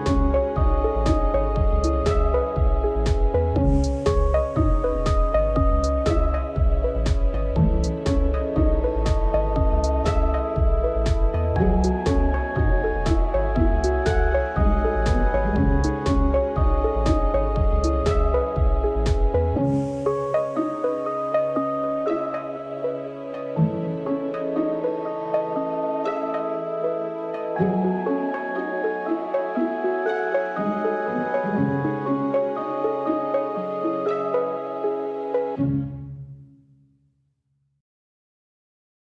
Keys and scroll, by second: 2.3 ctrl+z.